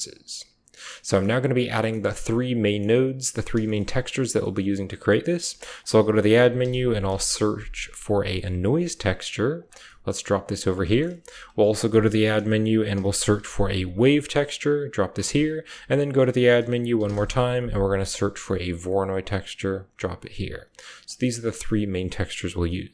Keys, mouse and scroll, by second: 1.0 click, 1.6 middle click, 2.6 middle click, 4.3 drag, 5.3 shift+a, 8.5 click, 8.7-10.0 typing, 9.7 click, 10.4 click, 11.1 shift+a, 14.4 typing, 15.6-16.5 typing, 18.9-21.1 typing, 20.3-20.8 drag, 21.0 click.